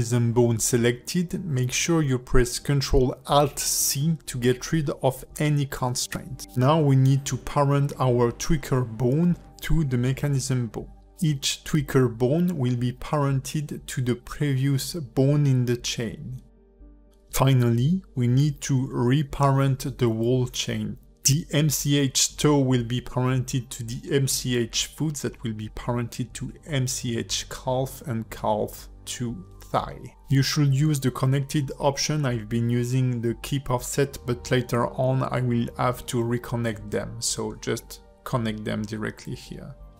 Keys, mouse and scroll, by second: 1.8 ctrl+F2, 4.1 KP_0, 6.9 shift+middle click, 7.7 click, 8.4 Tab, 8.8 shift+middle click, 9.3 shift+click, 10.3 ctrl+p, 12.0 click, 13.6 click, 14.3 click, 14.8 click, 15.6 shift+click, 16.4 ctrl+p, 17.7 shift+middle click, 18.0-18.3 scroll up 2, 18.3 click, 18.7 shift+click, 19.3 ctrl+p, 20.1 click, 20.9 click, 21.3 shift+click, 21.8 ctrl+p, 22.4 Tab, 22.7 click, 23.0-23.3 scroll down 2, 23.3 r, 24.4 click, 24.8 r, 26.1 click, 26.4 r, 27.5 scroll up 2, 28.0 shift+middle click, 28.6 click, 32.3 click, 32.7 Tab, 33.2 shift+click, 34.0 ctrl+p, 36.2 click, 36.5 shift+middle click, 37.2 shift+click, 38.0 ctrl+p, 39.0 shift+middle click, 39.4 click.